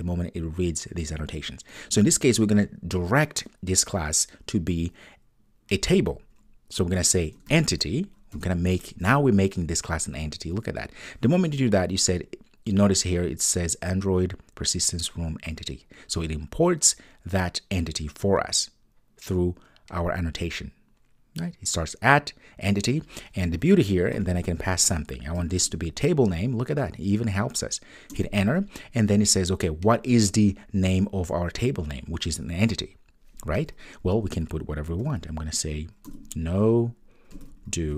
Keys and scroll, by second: 8.3 Return, 28.1 Return.